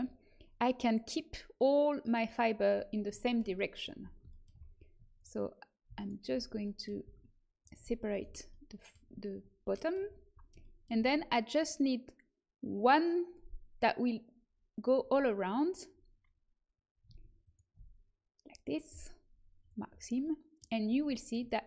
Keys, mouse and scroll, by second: 2.8-9.0 middle drag, 5.1-9.2 right drag, 9.0 click, 9.2-10.8 middle drag, 17.4-19.2 right drag, 19.5-21.6 drag, 20.1 right click.